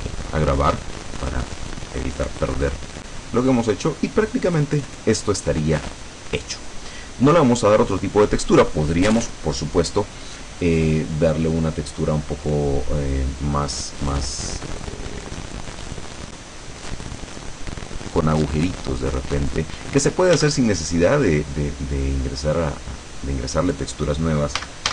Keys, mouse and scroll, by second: 12.5-12.9 scroll up 2, 13.0 scroll down 2, 13.8 right click, 19.8 scroll up 2, 20.4 Tab, 24.7 a.